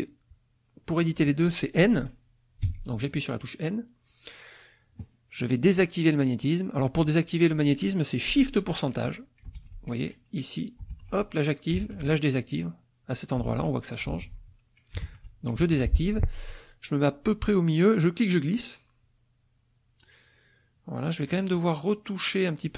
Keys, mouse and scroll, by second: 2.6 n, 18.0-21.4 drag.